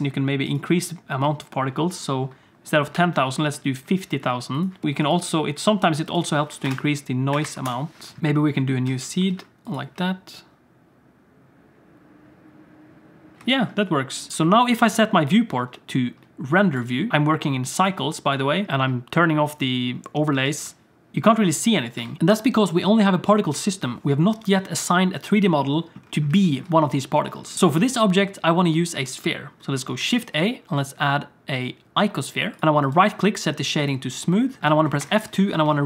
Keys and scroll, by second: 8.8 alt+a, 9.3 ctrl+s, 9.9 space, 13.4 space, 14.9 ctrl+s, 20.4 alt+shift+z, 22.0 alt+shift+z, 27.5 ctrl+s, 27.5 shift+a, 30.0 shift+a, 32.6 ctrl+z, 35.0 F2.